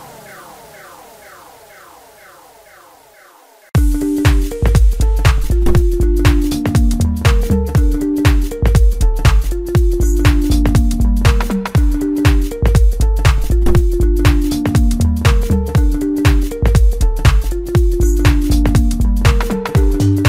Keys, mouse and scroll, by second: 1.9 i, 5.6-6.4 scroll up 1, 6.7 i, 10.3 scroll down 1, 10.7 middle click, 11.3 scroll up 3, 11.9-12.6 scroll up 3, 12.6 middle click, 13.5 g, 16.1-16.8 middle drag, 16.8-17.1 scroll up 2, 17.6 e, 18.9 e.